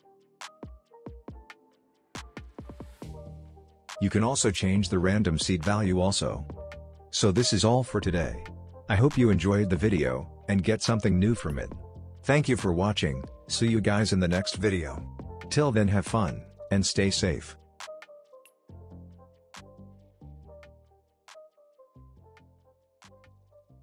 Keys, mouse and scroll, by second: 0.0-2.8 drag, 9.4 space, 12.0 space, 13.0-14.7 scroll up 1.